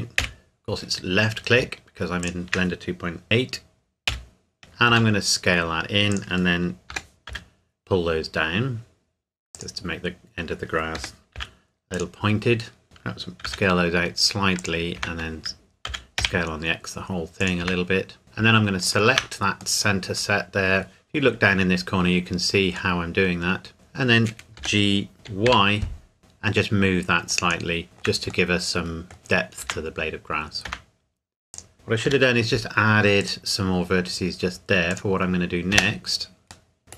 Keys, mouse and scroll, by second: 0.2 KP_Decimal, 1.0-1.6 scroll down 1, 2.2 shift+click, 4.0 KP_5, 4.6 KP_1, 4.9 s, 6.1 click, 6.9 g, 7.3 z, 9.5 click, 9.9-11.0 scroll down 1, 11.0 g, 11.4 z, 11.9 click, 12.2 scroll up 1, 12.4 scroll down 1, 12.8 shift+middle click, 13.4 s, 14.6 click, 15.0 Tab, 15.8 s, 16.2 x, 17.4 click, 17.6 Tab, 18.2 scroll up 1, 18.8 alt+click, 19.8 middle click, 23.7-24.6 scroll down 1, 24.6 g, 25.4 y, 27.3 click, 27.8-29.1 shift+middle drag, 29.6 Tab, 31.5 click, 31.7-32.0 scroll up 1, 32.0 k, 33.2 click, 35.7 space, 36.7 middle click.